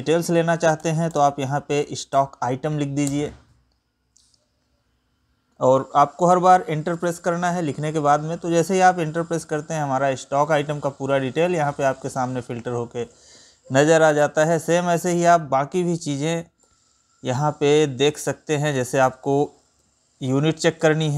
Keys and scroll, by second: 9.6 Right, 14.3 Up, 15.0 Right, 19.0 ctrl+n, 19.4 Up, 20.4 Right.